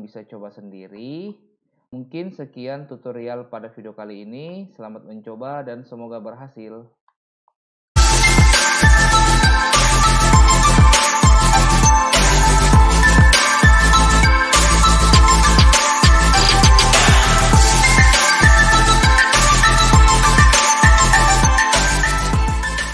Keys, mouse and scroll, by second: 0.9 middle click, 4.4 middle click, 7.1 middle click.